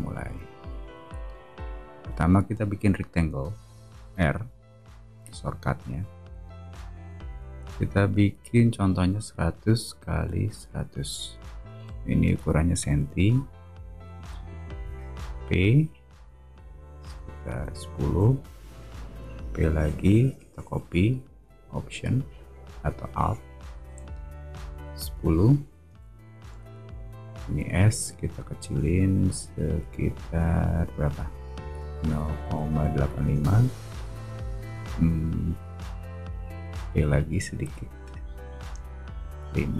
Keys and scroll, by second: 3.7 r, 8.9-11.3 typing, 11.7 Return, 12.7 space, 15.3 p, 17.2-19.3 typing, 24.8-26.4 typing, 25.8 Return, 27.5 s, 35.1 p.